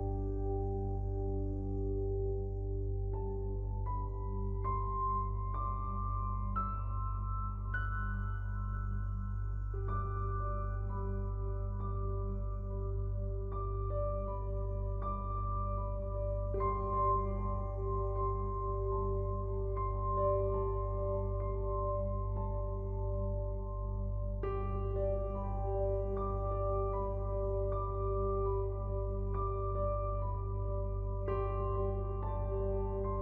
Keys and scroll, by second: 8.5 ctrl+z.